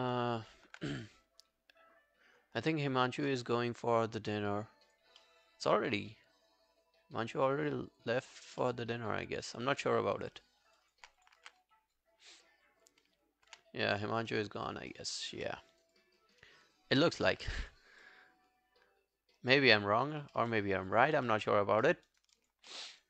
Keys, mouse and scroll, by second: 2.0-2.5 scroll up 4, 2.6 alt+middle click, 2.9 alt+right click, 5.2 middle click, 10.6 scroll down 1, 10.8 alt+click, 11.4 r, 13.5 w, 14.2-14.7 scroll up 3, 14.7 alt+middle click, 14.9 alt+right click, 15.2 alt+click, 15.5 alt+middle click, 15.8 alt+right click, 16.0 alt+click, 17.5 alt+middle click, 17.9 alt+scroll down 1, 18.1 alt+click, 20.4 alt+middle click, 20.6 alt+scroll down 1, 20.9 alt+click, 21.3 alt+middle click, 21.5 alt+scroll down 1, 21.6 alt+scroll up 2, 21.9 alt+middle click, 22.0 alt+scroll down 1, 22.1 alt+right click, 22.4 alt+click, 22.7 alt+middle click, 22.9 alt+right click.